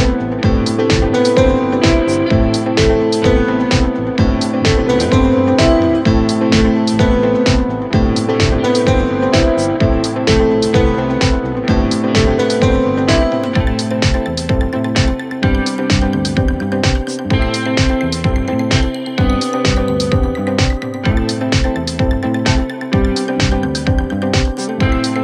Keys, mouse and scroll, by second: 0.3 click, 1.2-2.2 typing, 3.6 click, 6.5 ctrl+t, 7.3-8.5 drag, 11.2-11.7 alt+scroll down 1, 12.0 alt+scroll up 1, 12.4-14.7 drag, 17.0 alt+scroll up 1, 17.7 t, 18.1 click, 20.2 t, 20.6 click, 21.3 BackSpace, 21.5 Return, 23.6 ctrl+Down.